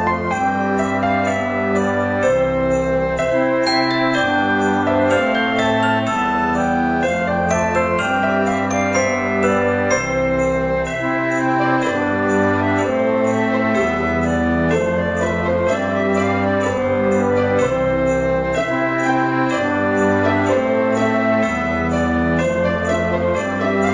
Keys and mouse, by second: 0.6 click, 0.7 g, 0.9 z, 2.4 click, 2.6 Tab, 2.9 click, 3.5 middle click, 4.8 click, 5.1 Tab, 5.7 shift+middle click, 8.2 click, 9.1 click, 10.7 alt+z, 11.5 s, 13.4 click, 16.5 Tab, 16.8 click, 19.1 F6, 20.4 shift+a, 23.0 click.